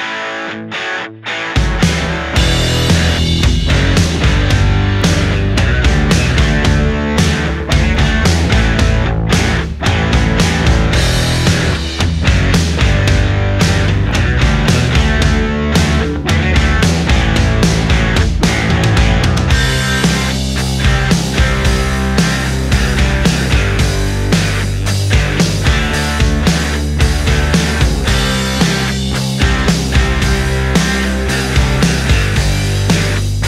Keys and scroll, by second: 4.8 ctrl+z, 6.7 space, 7.2 ctrl+z, 9.3 ctrl+z, 13.8 space, 15.9 ctrl+z, 18.3 space, 27.9 ctrl+z, 28.5 ctrl+z.